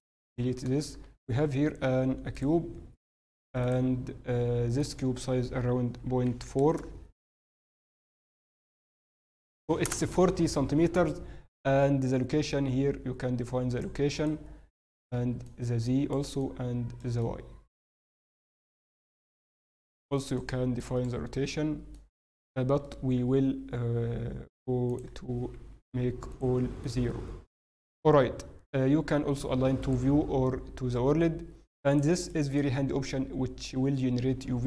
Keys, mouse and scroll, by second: 0.8 click, 0.8 shift+a, 3.7 click, 3.7 shift+a, 12.4 click.